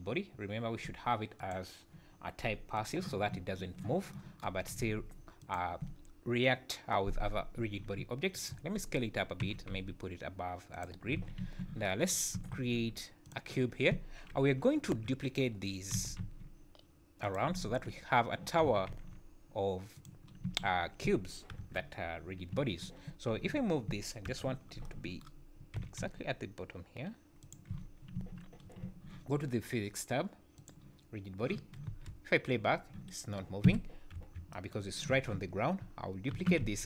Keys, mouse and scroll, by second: 1.4 click, 3.3 `, 4.8 s, 7.6 s, 8.8-9.3 scroll down 3, 9.4 g, 11.2 alt+a, 11.4 `, 12.5 shift+a, 14.9 KP_1, 15.2-15.5 scroll up 5, 16.0 g, 17.6 `, 18.6 g, 20.3 scroll down 3, 20.5 `, 20.8-21.3 scroll up 4, 21.3 scroll down 2, 21.9 scroll up 3, 22.2-22.5 scroll down 4, 22.5 `, 23.0-23.4 scroll down 1, 23.4 z, 24.3 KP_1, 24.6 scroll up 3, 25.8 g, 27.7 z, 28.0 scroll down 6, 28.2 `, 28.6 scroll down 2, 28.8 `, 30.6 click, 31.9 space, 33.6 Escape, 34.1 KP_1, 35.1 z, 36.3 shift+d.